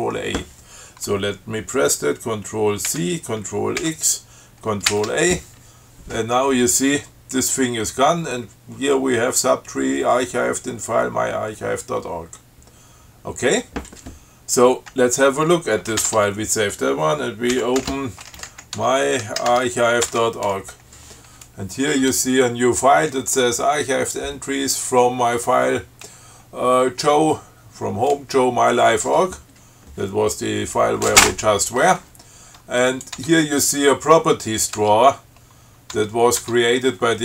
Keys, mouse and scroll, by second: 3.1 ctrl+c, 4.1 ctrl+x, 5.1 ctrl+a, 16.1 ctrl+x, 16.2 ctrl+s, 17.8 ctrl+x, 18.1 ctrl+f, 18.6 ctrl+m, 18.7 y, 19.0 Tab, 19.5 a, 19.7 Tab, 20.3 Return, 22.1 scroll up 2, 33.1 click, 33.4 Tab, 35.0 Tab, 36.2 Tab.